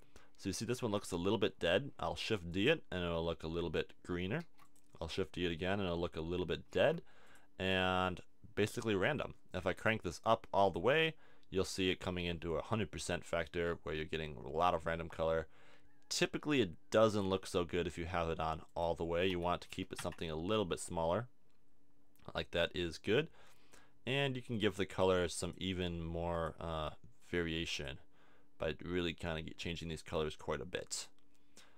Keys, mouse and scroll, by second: 2.1 shift+d, 4.4 shift+d, 6.8 shift+d.